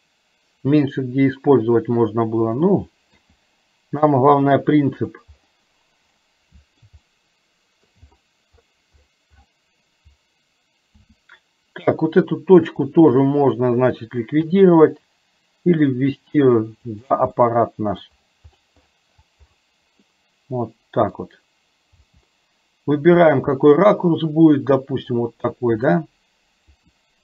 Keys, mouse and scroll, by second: 3.3 g, 6.2 scroll up 1, 6.4 middle click, 7.2-8.1 shift+middle drag, 11.1 s, 14.6 g, 17.4-18.1 middle drag, 17.4 scroll up 1, 20.1-21.2 middle drag, 21.2 scroll down 1, 22.1 g, 23.6-25.2 middle drag, 25.2 scroll down 1, 26.8 r.